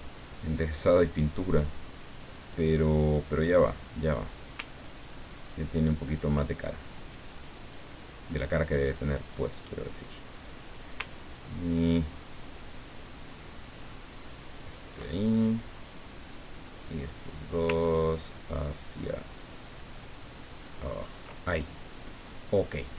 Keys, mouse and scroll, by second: 2.4 click, 3.1 click, 4.8-6.3 ctrl+drag, 7.3 click, 8.9-11.0 drag, 11.3-15.2 ctrl+drag, 15.3 ctrl+click, 16.3 click, 17.7-21.6 ctrl+drag, 22.2 click.